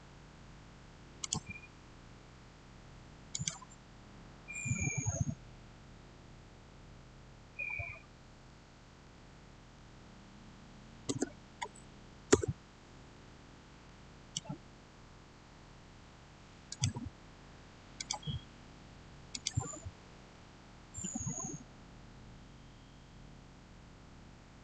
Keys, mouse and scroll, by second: 1.1 click, 3.2 click, 8.9-9.6 typing, 10.9 Return, 13.1 scroll down 1, 13.7-16.6 middle drag, 16.6 click.